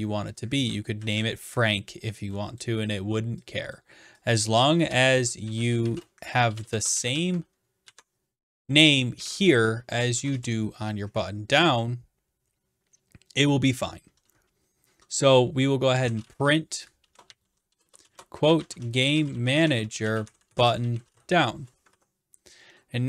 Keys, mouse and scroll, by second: 1.0 ctrl+c, 2.6 click, 4.3 click, 4.7-7.5 typing, 7.8 ctrl+v, 9.0-10.6 typing, 15.7-22.3 typing.